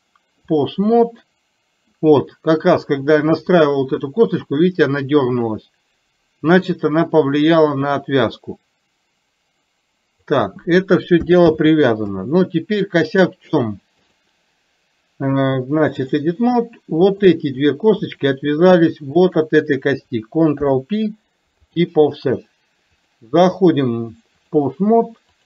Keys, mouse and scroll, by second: 1.0 middle click, 2.7 click, 6.6 click, 8.5-10.4 drag, 14.1-16.2 drag, 17.1 click, 18.0 shift+click, 19.1 shift+click, 23.7 click.